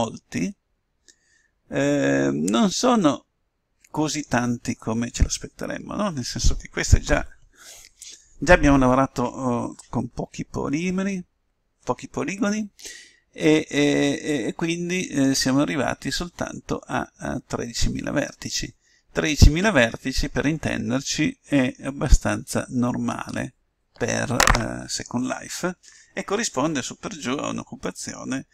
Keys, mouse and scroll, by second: 14.3-15.9 middle drag, 20.0-21.8 middle drag, 21.8 middle click.